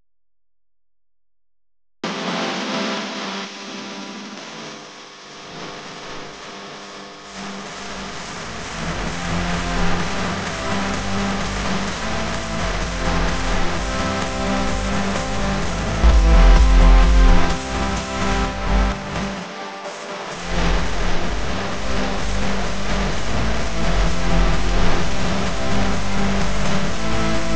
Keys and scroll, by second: 0.3 r, 4.3 a, 13.8 space, 15.0 super+z, 21.1 r, 25.0-26.0 typing.